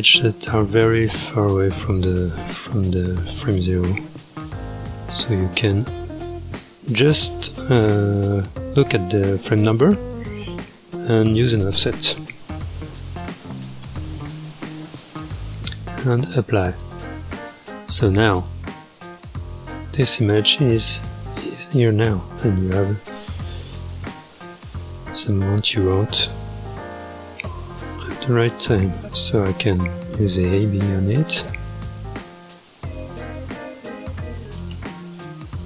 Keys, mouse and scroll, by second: 0.0-3.7 drag, 11.4-16.9 drag, 18.9-20.2 middle drag, 20.2-24.2 drag, 24.4-25.7 scroll up 13, 25.7-29.3 drag, 30.4 click, 31.2 space, 34.7 space, 35.1 click.